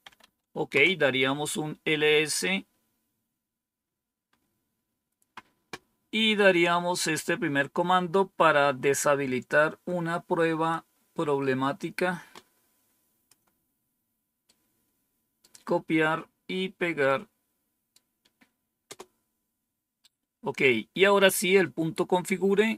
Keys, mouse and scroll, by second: 0.0-0.6 typing, 0.6 Return, 10.6-13.2 drag, 14.3 right click, 16.9 right click, 18.8 Return, 21.5-22.3 scroll down 1.